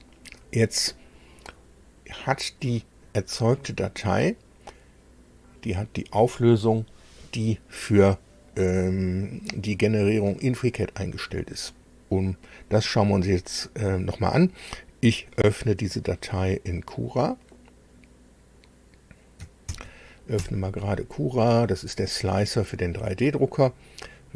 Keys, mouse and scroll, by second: 19.1 ctrl+alt+b, 19.9 KP_7.